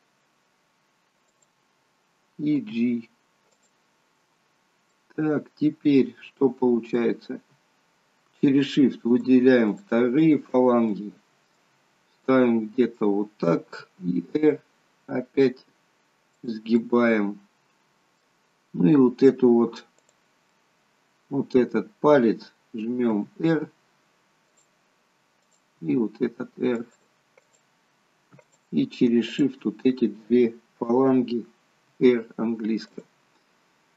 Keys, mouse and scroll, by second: 2.7 g, 4.8 middle click, 8.4 shift+click, 9.0 shift+click, 9.8 shift+click, 10.3 shift+click, 11.0 middle click, 11.8-12.4 scroll down 3, 12.2 middle click, 14.0 r, 16.9 middle click, 18.8-19.2 scroll up 3, 20.1 click, 20.6 middle click, 23.3 r, 25.4 click, 25.8 r, 27.5 click, 28.4 click, 29.3 shift+click, 32.0 r, 33.6 scroll up 2.